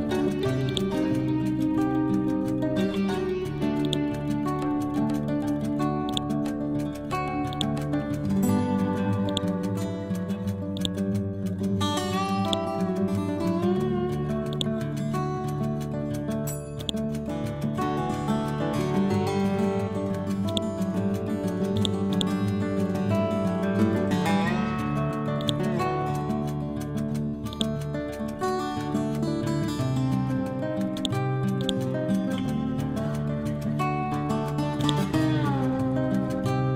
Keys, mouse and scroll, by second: 0.7 ctrl+click, 1.9-2.6 scroll down 1, 2.6 scroll up 1, 3.9 click, 6.1-14.6 drag, 16.9 right click, 20.5 click, 22.2 right click, 25.4-34.8 drag, 34.8 click.